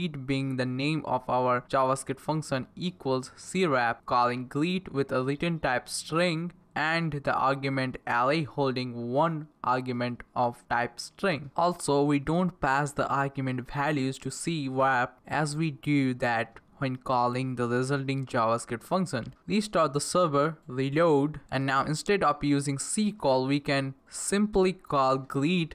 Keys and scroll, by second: 0.0-9.6 typing, 9.7 Down, 9.8 Return, 11.1-14.0 typing, 12.2 Left, 14.0 Down, 14.2 Return, 14.6 Right, 14.7 Right, 18.1 Up, 18.9 Down, 19.7 ctrl+c, 20.0 Up, 20.1 Return, 20.6 Up, 20.6 Return, 25.5-25.7 typing.